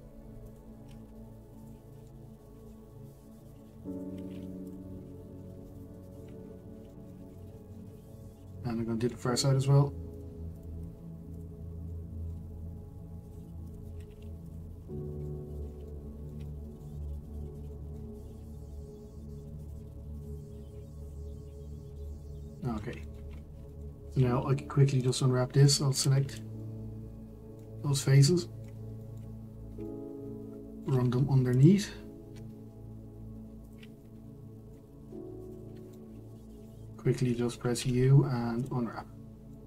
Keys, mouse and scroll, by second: 1.6 q, 2.1-3.5 shift+middle drag, 3.5 click, 4.7 q, 5.0-5.6 scroll down 6, 5.6 middle click, 6.9 shift+middle click, 7.2-7.6 scroll up 1, 7.6 shift+middle click, 7.9-8.5 scroll up 2, 8.5-10.2 shift+middle drag, 10.2 click, 11.4 q, 11.9-13.3 middle drag, 13.3 click, 14.5 q, 14.7-15.2 scroll down 3, 15.2-16.9 middle drag, 16.9-17.7 scroll up 5, 17.7 shift+middle click, 18.2-19.2 scroll up 1, 19.2-19.7 scroll up 1, 19.7 click, 21.1 q, 21.4-22.1 scroll down 7, 22.1-23.3 middle drag, 23.3-24.6 scroll up 5, 23.7 shift+middle click, 25.1 click, 26.6-29.3 middle drag, 29.3-29.8 scroll up 3, 29.8-31.6 middle drag, 31.6 ctrl+click, 33.8 shift+click, 34.0-35.5 middle drag, 35.5 ctrl+click, 35.9-37.4 middle drag, 37.4-37.7 scroll down 2, 37.7 u, 39.5 middle click.